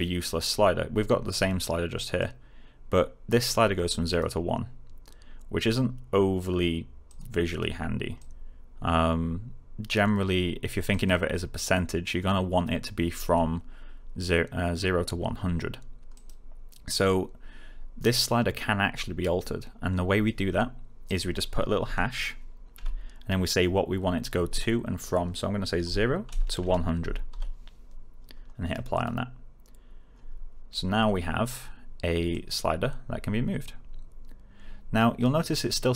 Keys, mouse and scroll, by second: 2.1-4.3 drag, 7.0 click, 16.1 click, 21.0 click, 21.8 space, 25.8-27.7 typing, 28.9 click, 32.2-35.4 click.